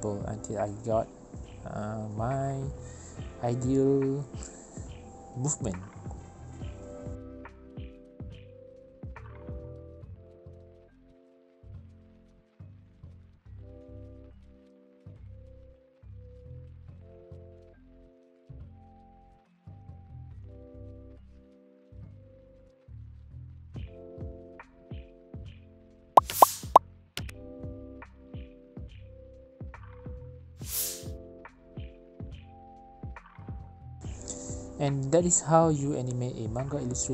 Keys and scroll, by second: 4.1 v, 10.5 ctrl+z, 10.7 ctrl+z, 11.0 ctrl+z, 11.0 space, 11.6 space, 12.7 v, 13.2 ctrl+c, 13.8 ctrl+v, 17.5 space, 23.0 alt+space, 23.5 Return, 23.9-24.9 typing, 24.4 Down, 24.5 Down, 24.8 Return, 25.1 Down, 25.2 Down, 25.4 Down, 25.4 Return, 28.2 alt+Return, 29.0 space, 29.5 space, 31.1 ctrl+z, 31.1 space, 31.1 ctrl+z, 32.6 ctrl+z, 34.7 space.